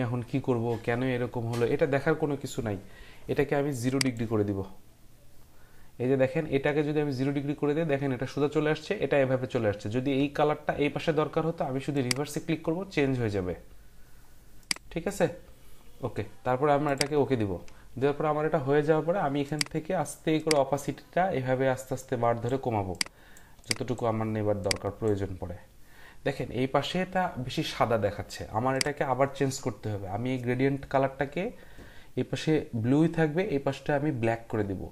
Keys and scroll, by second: 6.6 Delete.